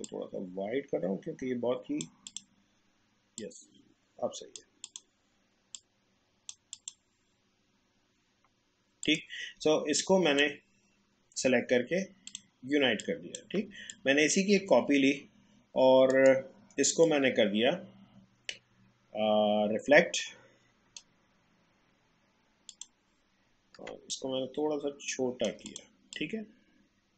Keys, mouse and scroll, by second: 0.0-6.7 drag, 9.0-13.9 drag, 13.9-16.1 alt+drag, 16.1 right click, 17.0-22.7 drag, 24.1-27.1 shift+drag.